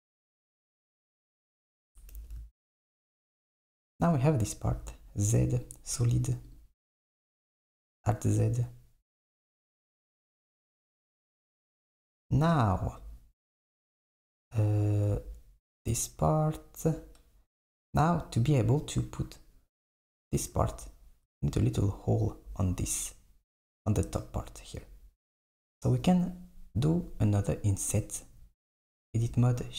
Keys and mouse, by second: 1.8 s, 2.1 Tab, 4.8 z, 6.6 click, 7.4 alt+z, 13.9 KP_1, 15.1 KP_3, 19.9 click, 21.7 click, 23.7 click, 25.4 Tab, 27.9 click.